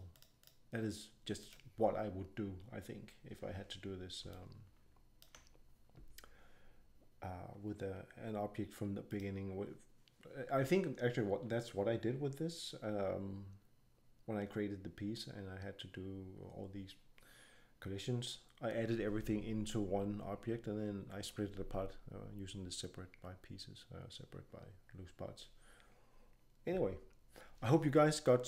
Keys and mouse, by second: 4.3-4.7 drag, 5.0-6.6 drag, 9.1-11.7 drag.